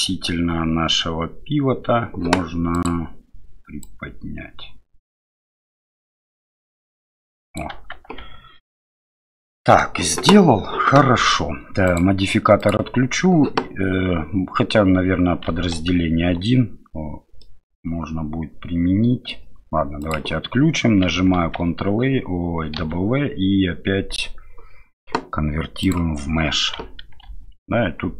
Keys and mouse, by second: 3.8-7.6 drag, 8.2 Tab, 9.1 middle click, 12.7-15.5 drag, 15.8 ctrl+1, 17.4-19.3 middle drag, 20.1-21.1 drag, 21.4 ctrl+a, 22.8 w, 27.2 ctrl+3, 28.0 ctrl+2.